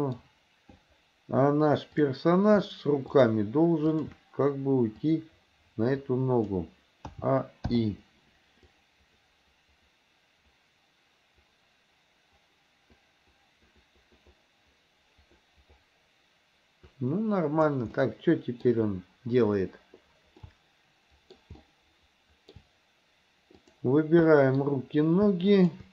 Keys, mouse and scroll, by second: 2.0 click, 3.2 shift+click, 3.9 shift+click, 5.0-6.6 drag, 7.2 a, 7.8 i, 8.8-17.8 drag, 18.0-18.7 middle drag, 20.5-21.4 shift+middle drag, 21.7-22.6 shift+middle drag, 23.6 click, 24.3 middle click, 25.5 shift+click.